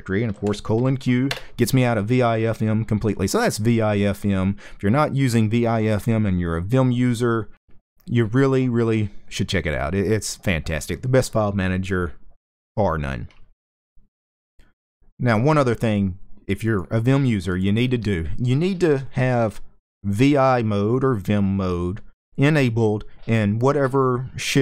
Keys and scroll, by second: 0.8-1.5 typing.